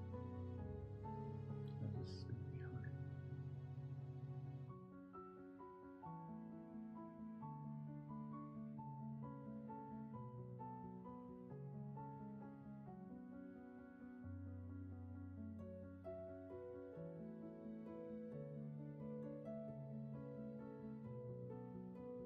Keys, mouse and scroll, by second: 1.0 space, 9.1 space, 13.3 ctrl+z, 16.9 ctrl+z.